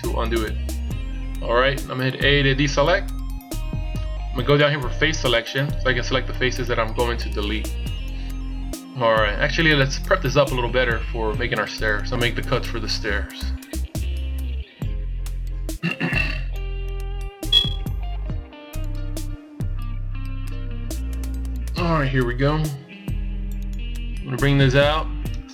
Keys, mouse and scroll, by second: 2.9 a, 5.5 click.